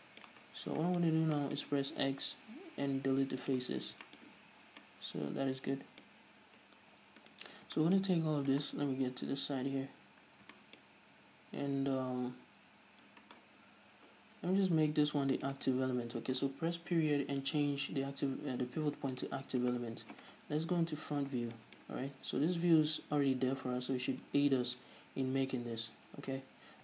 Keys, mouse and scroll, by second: 0.0-7.6 middle drag, 0.8-1.2 scroll down 1, 1.4 scroll up 1, 2.3 x, 4.1 scroll up 1, 4.7 z, 6.5-7.6 scroll up 1, 7.6 alt+right click, 8.1-15.7 shift+middle drag, 8.4-9.2 scroll up 2, 9.2 KP_3, 10.1-10.9 scroll up 2, 11.2-13.2 scroll up 2, 13.2 scroll up 1, 13.4-14.4 scroll down 2, 14.4-15.7 scroll up 2, 15.7 shift+right click, 17.1 ., 19.8-20.1 scroll down 1, 21.0 KP_1, 21.7 scroll down 1, 21.9-26.8 shift+middle drag, 22.2-23.8 scroll up 1, 23.8 z, 26.6-26.8 scroll up 1.